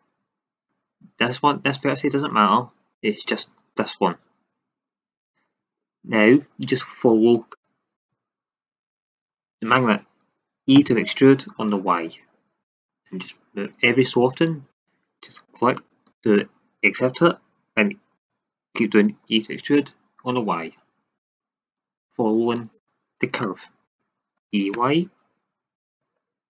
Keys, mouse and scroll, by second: 10.7 e, 12.7-14.2 drag, 18.1 e, 21.2 drag, 22.0 click, 24.3 e, 25.8-26.4 drag.